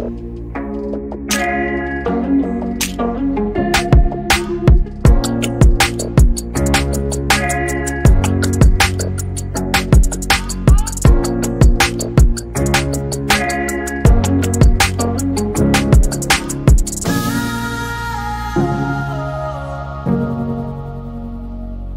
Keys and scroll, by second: 0.0-0.1 typing, 2.8-4.6 typing, 9.3-10.1 typing, 11.1-12.5 typing, 14.2 q, 20.7-21.5 typing.